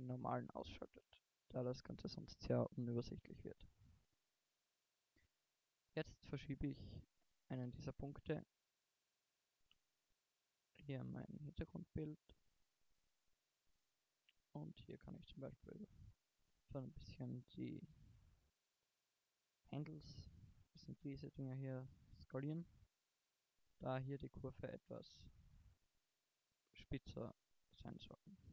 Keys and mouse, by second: 3.0 KP_1, 5.3 g, 7.6 g, 10.9 g, 15.0 middle click, 15.3 s, 17.3 g, 20.0 g, 21.7 g, 23.6 s, 24.8 s, 28.2 e.